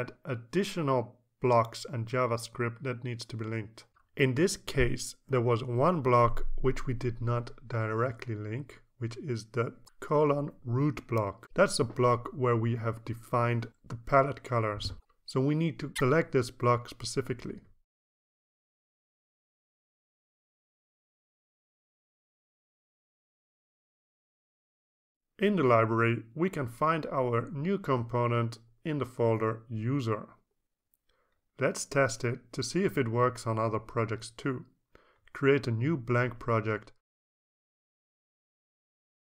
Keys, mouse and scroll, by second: 3.9-17.4 scroll up 1, 18.0 click, 19.4 click, 21.6 click, 24.0 click, 25.1 click, 29.2 click, 33.4 click, 37.8 click, 38.8 click, 39.1-39.2 typing.